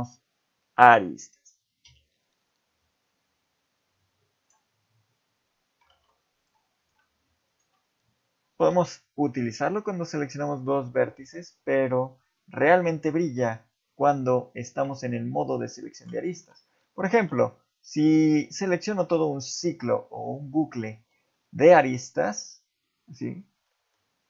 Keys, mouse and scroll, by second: 1.8 x, 5.9 ctrl+Tab, 6.8 click, 7.5 shift+click, 8.7 x, 10.2 middle click, 10.6 ctrl+z, 10.9 ctrl+z, 11.2 ctrl+z, 11.7 ctrl+z, 12.2 ctrl+z, 16.2 middle click, 16.4 z, 16.8 middle click, 18.6 ctrl+alt+click, 19.2 middle click, 19.8 scroll down 2, 20.2 middle click, 21.0 z, 21.3 middle click, 22.8 middle click, 23.3 scroll down 1, 23.7 middle click.